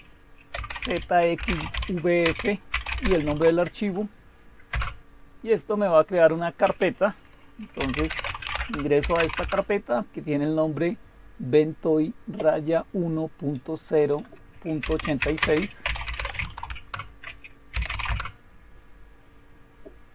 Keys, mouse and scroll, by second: 0.0-3.5 typing, 4.7 Return, 5.4 typing, 7.6-9.5 typing, 10.5-11.2 typing, 12.0-13.6 drag, 14.0 click, 14.8-18.4 typing.